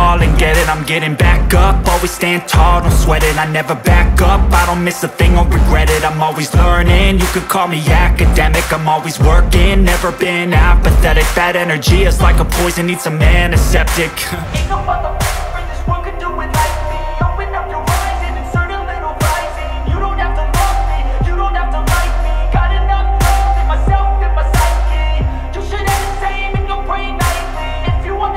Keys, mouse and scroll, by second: 0.6-2.9 drag, 2.9-3.9 scroll up 1, 4.7 click, 6.4 scroll up 1, 8.0 click, 8.8-9.1 scroll down 1, 10.4 scroll up 1, 11.6 click, 12.0-12.4 scroll down 1, 12.5-13.1 scroll up 1, 13.8-22.1 drag, 22.6 scroll down 1, 23.3 scroll up 1, 24.4-26.1 drag, 26.6 scroll down 1, 27.0-28.2 scroll up 1.